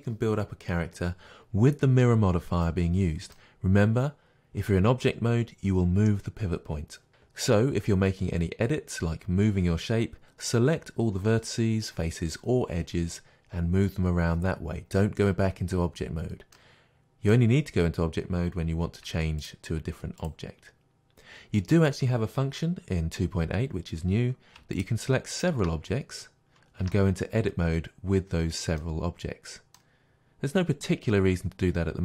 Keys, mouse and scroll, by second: 16.6-19.4 middle drag, 19.1 Tab, 19.4-20.3 drag, 24.8 shift+click, 25.4-26.8 shift+drag, 26.8 Tab, 28.8-32.0 middle drag, 30.1-30.5 scroll up 2.